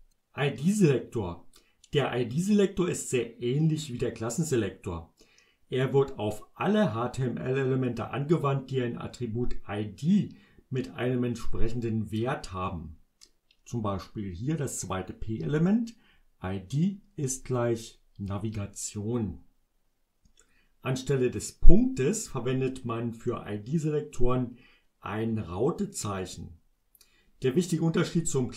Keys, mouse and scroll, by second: 15.2-18.5 drag.